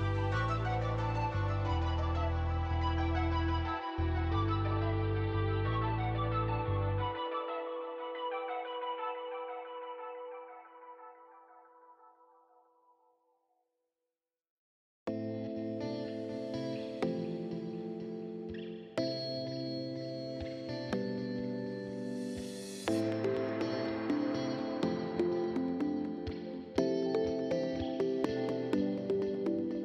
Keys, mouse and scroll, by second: 0.9 click, 1.7-3.2 typing, 2.0-5.3 drag, 6.5 right click, 7.9 click, 11.9 click, 12.6 click, 16.2 click, 17.0 click, 17.8 click, 18.8 5, 19.0 Return, 19.6 click, 20.1 click, 21.3 click, 21.9 right click, 22.5 click, 22.7 right click, 23.7 click, 29.5 right click.